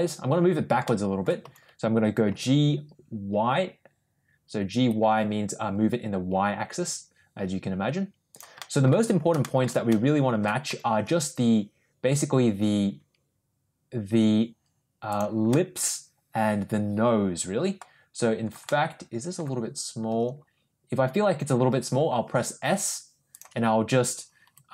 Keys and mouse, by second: 0.8 middle click, 1.3 g, 8.5 middle click, 9.3 shift+middle drag, 9.8 middle click, 10.6 g, 15.4-17.7 middle drag, 18.6-19.3 middle drag, 20.0 s, 24.3 g.